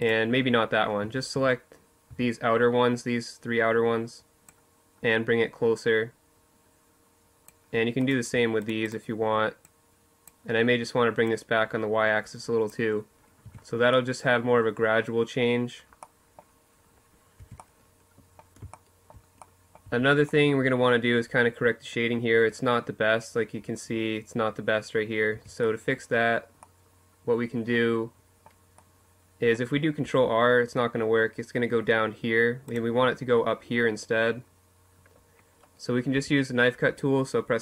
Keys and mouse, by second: 0.1 z, 0.8 z, 3.2-5.0 drag, 6.7-9.4 right drag, 8.4-11.8 drag, 11.8 middle click, 12.2 Tab, 12.2 click, 16.1 Tab, 18.6 Tab, 24.1 Tab, 28.7 ctrl+r, 31.5 click, 32.3-34.9 middle drag, 34.9 k.